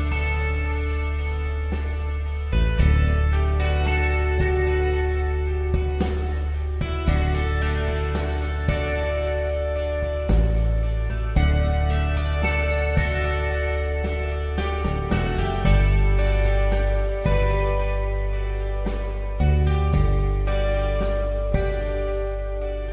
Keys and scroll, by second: 1.4 space, 2.9-3.2 typing, 5.6 space, 9.4 v, 9.8 space, 20.3 d, 20.5 space.